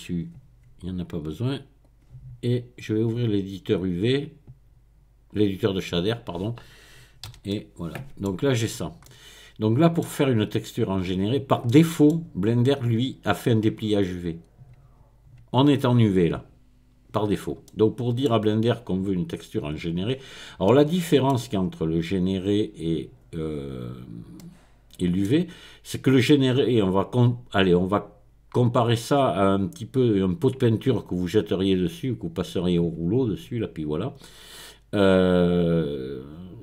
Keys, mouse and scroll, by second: 1.8-3.1 drag, 3.9 click, 5.4 click, 7.3 n, 7.5-8.3 scroll down 1, 8.3-10.0 middle drag, 10.0-11.7 scroll up 2, 11.7 middle click, 17.6-18.3 scroll down 2, 18.3-20.1 middle drag, 20.1-20.7 scroll up 2, 20.7-22.5 middle drag, 22.5 click, 23.5 middle click, 23.6-24.0 scroll up 1, 24.0-24.4 scroll down 1, 24.4-25.5 middle drag.